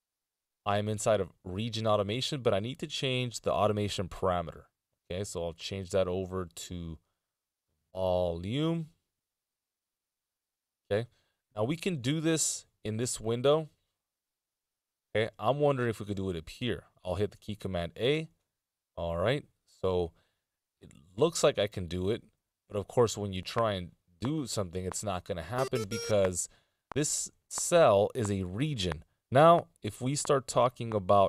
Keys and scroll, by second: 12.5 Delete, 17.7 a.